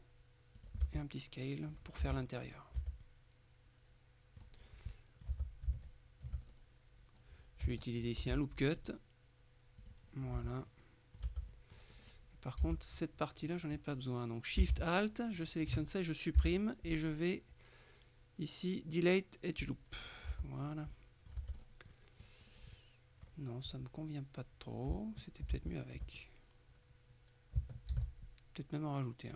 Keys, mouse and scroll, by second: 0.7 click, 0.9 s, 1.8 click, 2.1 z, 2.4-3.4 middle drag, 2.9 Tab, 4.7-5.0 scroll up 2, 5.0 middle click, 5.4 Tab, 5.9 shift+middle click, 6.5-7.0 shift+scroll up 3, 7.1-7.7 scroll down 2, 8.3 ctrl+r, 8.9 ctrl+click, 9.9 click, 10.3-10.8 scroll up 1, 10.4 Tab, 11.3 Tab, 11.6 click, 12.0-12.6 scroll up 1, 12.6 scroll up 1, 12.7 a, 15.5 alt+shift+right click, 16.5 Delete, 19.7 click, 20.1-20.7 scroll down 1, 20.4 Tab, 21.0 scroll down 1, 21.0 click, 21.5 Tab, 21.6-22.0 scroll up 1, 22.0 middle click, 22.6 scroll up 1, 22.8 middle click, 25.6 ctrl+z, 28.0 ctrl+r.